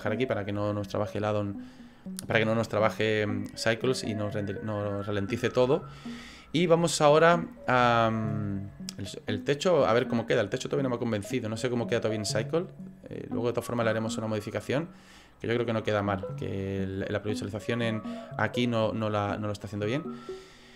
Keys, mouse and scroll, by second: 4.2-5.1 scroll down 3, 5.1 scroll down 1, 5.8 shift+middle click, 12.4 click, 19.8 click.